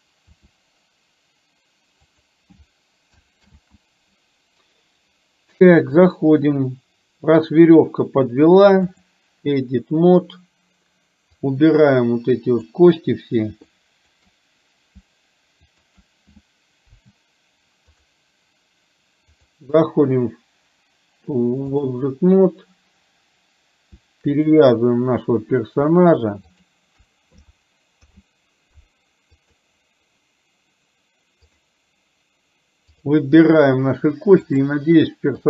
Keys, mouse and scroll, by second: 0.4 r, 3.5 ctrl+z, 6.0-9.3 drag, 11.6-12.9 drag, 14.0 shift+click, 15.8 shift+click, 17.0 Delete, 19.6-22.0 drag, 24.5 click, 28.0 ctrl+p, 31.5 click, 34.6-35.4 drag.